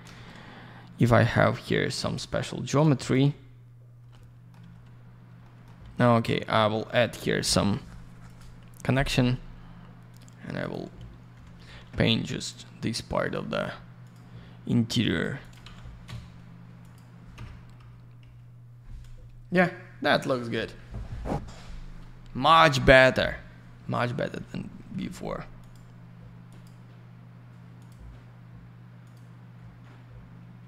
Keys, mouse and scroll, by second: 0.1 alt+shift+й, 1.3 click, 1.5 alt+middle click, 2.1 click, 3.0 click, 3.1 click, 4.6 alt+й, 5.0 scroll down 1, 5.4 alt+middle click, 6.5 alt+middle click, 6.7 alt+middle click, 6.9 click, 7.1 double click, 8.2 click, 8.3 click, 8.9 click, 9.0 click, 10.1 click, 10.1 click, 10.6 click, 10.7 click, 11.3 b, 12.4 click, 12.5 click, 13.2 click, 13.3 click, 14.0 click, 14.1 click, 15.1 click, 15.2 click, 15.4 click, 15.6 alt+shift+й, 16.8 click, 16.9 click, 17.3 F3, 18.3 F4, 19.2 scroll down 1, 24.7 middle click, 25.6 click, 26.4 click, 27.8 click, 29.0 click.